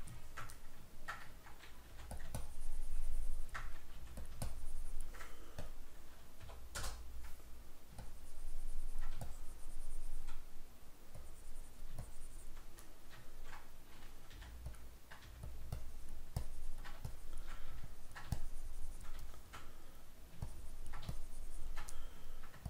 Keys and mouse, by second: 0.3-2.3 shift+middle drag, 2.0 f, 2.5-4.3 ctrl+drag, 4.1 f, 4.5-13.0 ctrl+drag, 6.9 Return, 13.0-14.9 middle drag, 14.4 f, 14.9 click, 15.3 f, 15.9-19.3 ctrl+drag, 19.3-20.5 shift+middle drag, 20.5-22.0 ctrl+drag, 22.0 middle click.